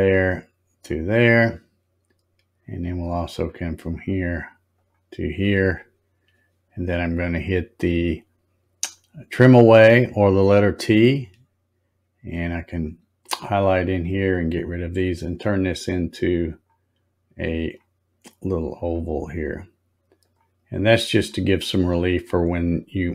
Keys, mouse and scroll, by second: 3.3 click, 4.7 click, 10.6 click, 13.3 click, 14.3 click, 15.2 click, 16.5 click, 17.6 click, 18.8 click, 20.2 click, 21.0 click, 22.1-22.9 scroll up 11.